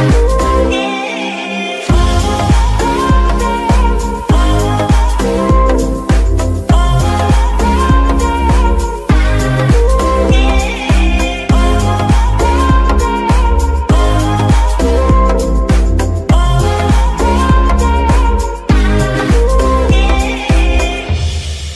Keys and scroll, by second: 0.0-0.3 typing, 0.6 Return, 3.6-4.7 typing, 4.9 Return, 6.5 ctrl+Tab, 8.4 z, 17.9 Tab, 18.2 z, 18.6 a, 19.0 g, 19.5 Escape, 20.5 Tab.